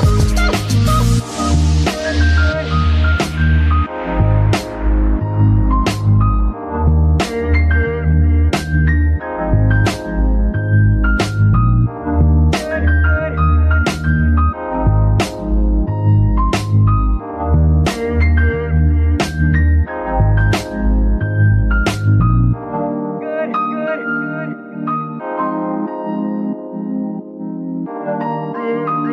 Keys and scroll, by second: 8.0 z, 8.7 alt+g, 10.3 alt+g, 10.4 alt+z, 14.2 alt+g, 14.3 alt+z, 17.9 z, 19.0 g, 19.1 z, 20.4 g, 21.1 z.